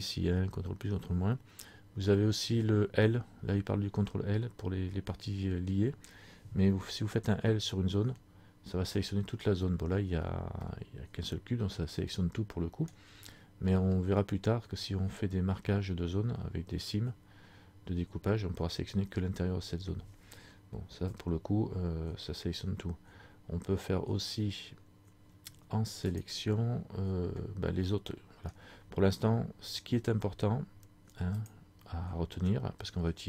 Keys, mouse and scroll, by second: 9.0 middle click, 10.8 middle click, 26.2 click, 28.0 middle click, 31.4 click.